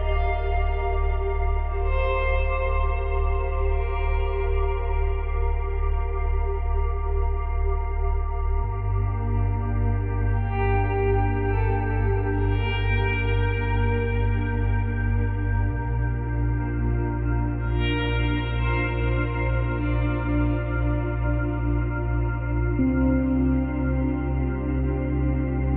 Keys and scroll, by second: 1.4 F9, 6.6 space, 11.5 space, 19.0 ctrl+z, 23.3 Delete, 25.2 Delete, 25.6 space.